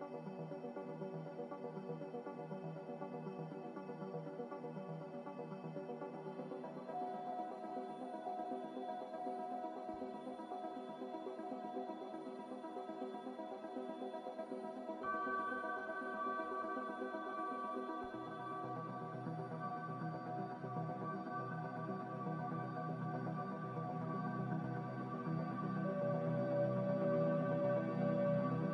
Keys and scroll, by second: 0.3 Return, 7.1 2, 7.1 5, 13.2 a, 17.4 5, 18.1 Return, 22.7 Return, 24.3 Return.